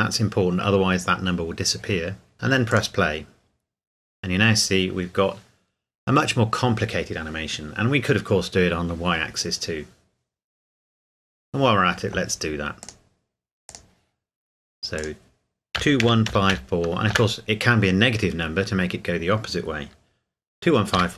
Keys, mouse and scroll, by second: 2.7 click, 12.8 click, 15.8 KP_2, 16.0 KP_1, 16.2 KP_5, 16.5 KP_4, 17.1 KP_Enter.